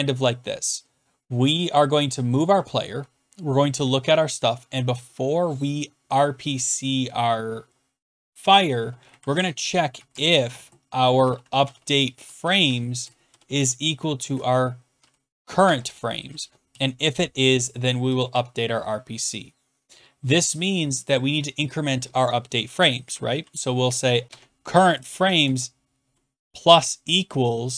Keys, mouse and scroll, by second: 2.4 Down, 3.8 Down, 8.7 Return, 9.7-17.2 typing, 15.6 Tab, 18.3 click, 18.3 Tab, 19.9 scroll down 2, 21.1 click, 22.5 BackSpace, 22.8 Return, 23.3 middle click, 23.6-25.4 typing, 24.9 Tab.